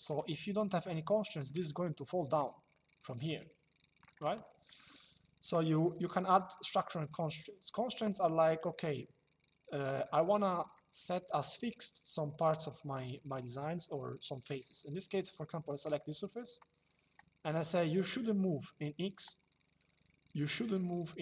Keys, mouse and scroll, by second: 3.0 shift+middle click, 4.0 click, 4.4 middle click, 6.0 click, 10.4 middle click, 15.5 click.